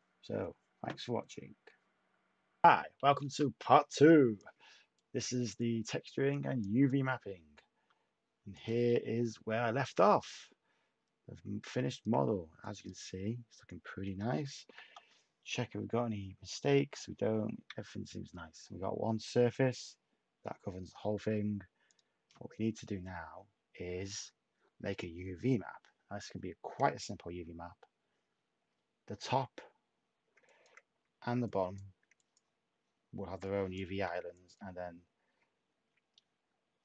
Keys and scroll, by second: 3.1 a, 14.6 m, 14.8 Return, 33.2 /.